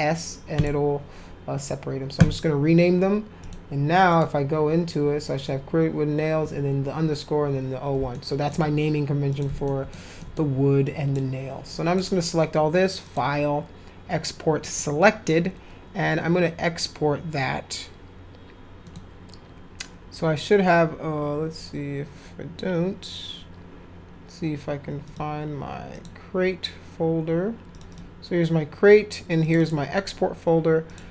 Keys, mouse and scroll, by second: 0.6 click, 2.2 click, 3.4 click, 4.1 click, 8.1 alt+middle click, 9.3 click, 9.7 alt+shift+middle click, 10.2 alt+middle click, 10.8 click, 11.7 click, 13.0 click, 14.6 click, 18.8 click, 25.0 click, 25.9 click, 27.7 click, 27.9 click, 29.4 click, 29.6 click, 30.9 click.